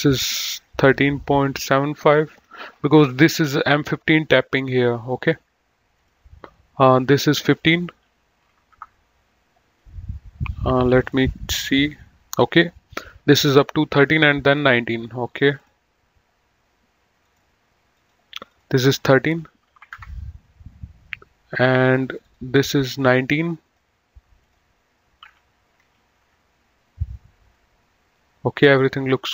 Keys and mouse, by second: 1.7 KP_1, 1.8 KP_3, 2.6 KP_7, 2.8 KP_5, 3.0 KP_Enter, 6.0 click, 8.4 KP_1, 8.5 KP_5, 8.7 KP_Enter, 10.9 click, 15.5 click, 17.3 click, 19.6 KP_1, 19.7 KP_3, 20.0 Return, 20.0 KP_Enter, 21.5 click, 23.5 click, 25.7 KP_1, 26.2 Return, 26.2 KP_Enter.